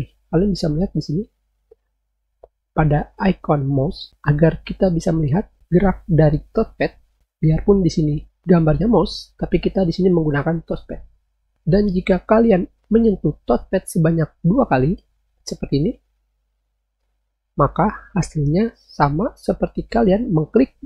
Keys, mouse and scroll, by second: 15.3 click.